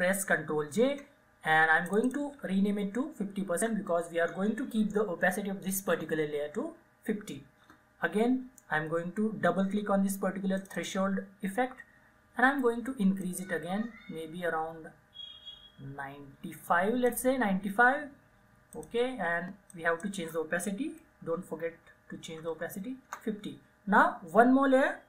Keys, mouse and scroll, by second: 0.6 ctrl+j, 1.9 click, 3.6-4.0 typing, 4.4 Return, 10.7 click, 13.3-18.8 drag, 22.1-23.1 typing, 23.1 Return.